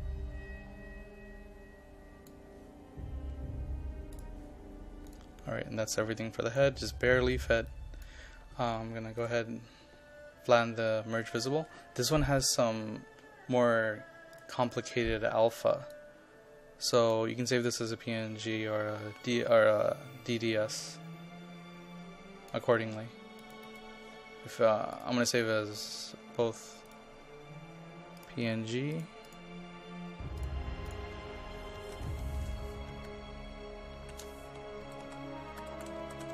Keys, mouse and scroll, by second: 31.8 click, 32.1 right click, 33.1 shift+click, 33.6 typing, 35.4-36.3 typing.